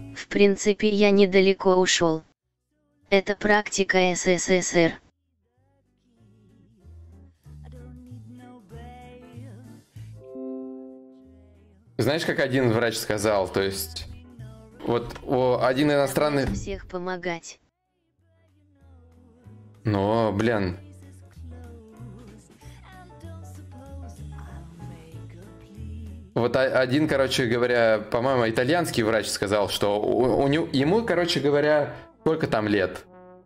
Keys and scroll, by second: 10.8 ctrl+shift+u, 14.4 ctrl+l.